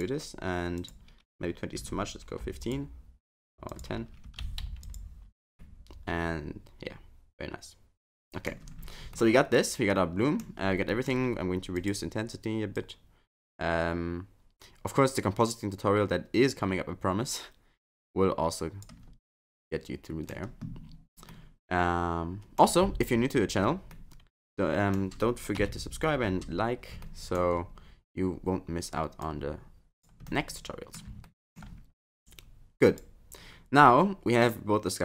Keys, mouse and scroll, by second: 5.6 middle click, 8.5 scroll up 1, 8.7-9.2 scroll down 7, 9.2 middle click, 10.6 scroll up 3, 10.9 middle click, 11.8 click, 12.8 click, 19.3 middle click, 21.3 middle click, 23.9 middle click, 25.6 KP_7, 26.5 scroll up 5, 27.0 shift+middle click, 27.7-28.7 scroll down 2, 29.2 click, 30.3 middle click, 31.3 shift+middle click, 33.1 click.